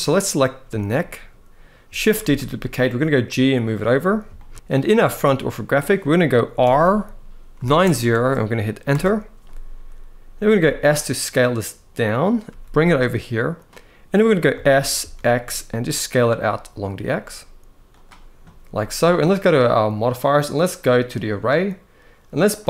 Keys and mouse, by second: 0.4 shift+middle drag, 2.0 shift+d, 3.1 click, 4.0 shift+middle drag, 4.5 -, 4.5 9, 4.5 0, 6.3 r, 7.2 9, 7.3 0, 8.6 Return, 10.3 s, 12.1 g, 14.2 s, 14.6 x, 20.9 click.